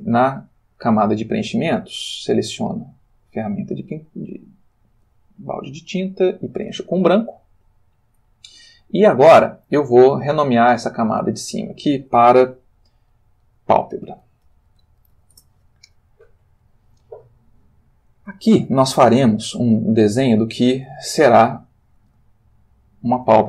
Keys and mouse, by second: 2.5 click, 3.9 click, 4.8 click, 6.1 click, 10.5 click, 11.3 click, 13.9-15.1 typing, 15.3 shift+Return, 21.3 ctrl+click, 22.4 ctrl+shift+click.